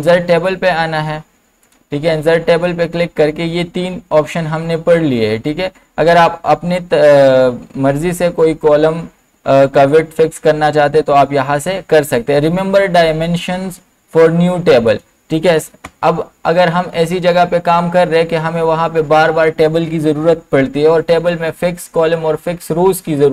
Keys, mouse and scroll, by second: 14.9 click, 14.9 click, 15.8 BackSpace.